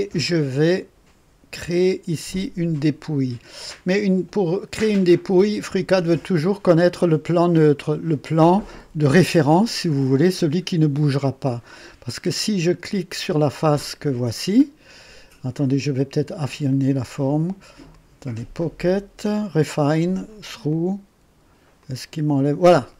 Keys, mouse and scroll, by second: 0.2-1.2 drag, 4.5-6.5 drag, 16.7 click, 17.9 click, 19.6 click, 20.7 click, 21.8 click, 22.6-22.9 drag.